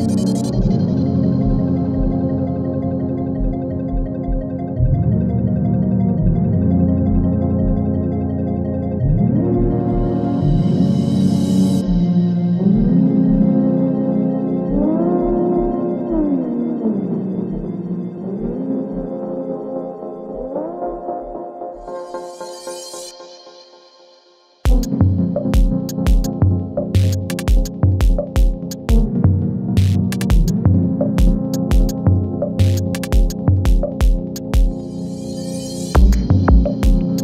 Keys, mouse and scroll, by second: 4.0 ctrl+shift+c, 6.9-10.3 typing, 10.6 Return, 13.2 click, 14.0 ctrl+d, 14.8-17.0 drag, 26.7 ctrl+z, 27.4-28.6 drag, 33.8 ctrl+c, 34.6 click, 36.7 click.